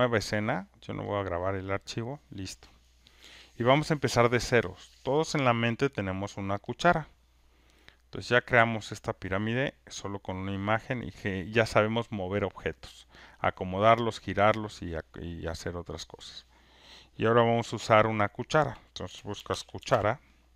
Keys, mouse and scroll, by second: 0.2-1.2 drag, 6.8 click, 8.9 click, 10.2 click, 19.3-20.4 typing.